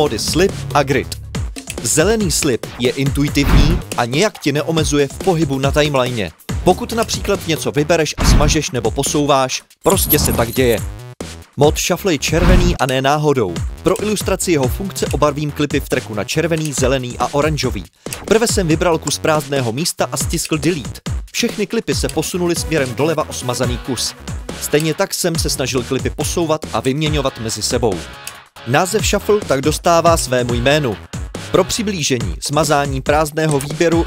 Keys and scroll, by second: 4.1 Delete, 19.0 Delete, 30.4 Delete.